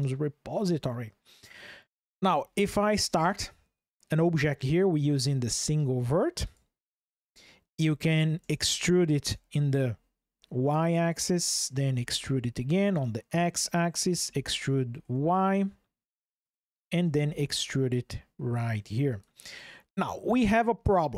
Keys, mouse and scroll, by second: 2.4 shift+a, 8.2 e, 9.0 y, 10.9 click, 11.7 e, 12.5 x, 13.4 click, 14.0 e, 14.8 y, 16.2 click, 16.8 e, 18.8 click, 20.6 shift+click.